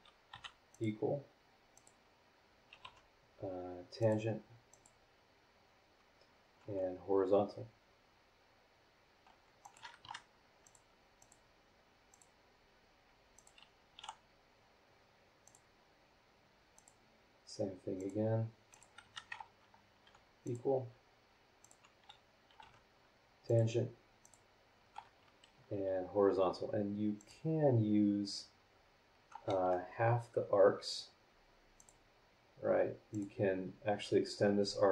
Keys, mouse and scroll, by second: 0.3 e, 0.7 click, 1.7 click, 2.8 y, 4.0 click, 4.7 click, 6.6 h, 9.6 click, 10.0 Escape, 10.6 click, 11.2 click, 12.1 click, 13.3 click, 13.9 h, 15.4 click, 16.7 click, 18.0 click, 18.7 click, 19.0 Escape, 20.1 e, 20.4 click, 21.6 click, 22.6 y, 23.5 click, 24.2 click, 25.7 h, 27.2 click, 29.5 Escape, 31.8 click, 33.1 click.